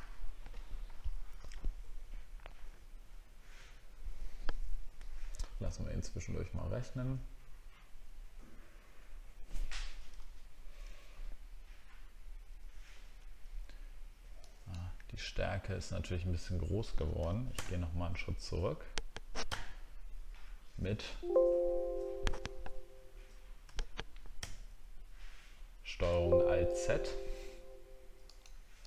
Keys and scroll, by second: 19.5 ctrl+alt+z.